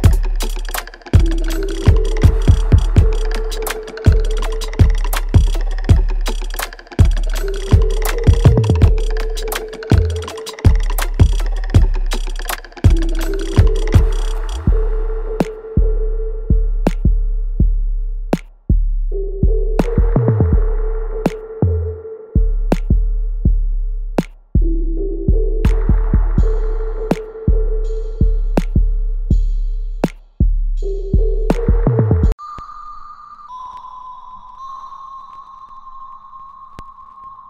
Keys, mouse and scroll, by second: 1.1 alt+middle click, 1.5 alt+right click, 2.3 alt+middle click, 2.6 alt+right click, 3.6 click, 6.0 alt+right click, 6.4 alt+middle click, 7.7-8.2 scroll up 1, 8.4 alt+middle click, 8.9 alt+right click, 10.0 click, 11.4 click, 16.0 click, 18.0 g, 18.5-19.5 scroll down 1, 20.4 alt+middle click, 21.1 alt+right click, 21.8 click, 23.5 g, 23.8-25.0 scroll down 1, 25.2 right click, 26.1 click, 26.5 alt+right click, 27.0-30.3 alt+drag, 30.3 alt+middle click, 31.1 alt+right click, 31.9 alt+middle click, 33.1 alt+right click, 33.6 alt+middle click, 34.5 ctrl+s, 35.0 right click, 36.2 click.